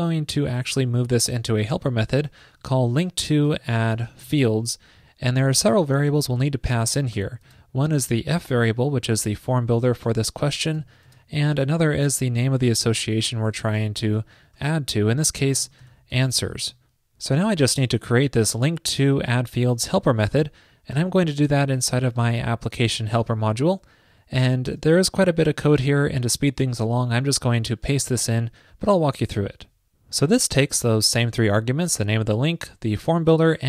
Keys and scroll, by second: 0.1 alt+Left, 5.4 super+Right, 16.8 super+s, 25.1 super+Return, 27.9 super+v.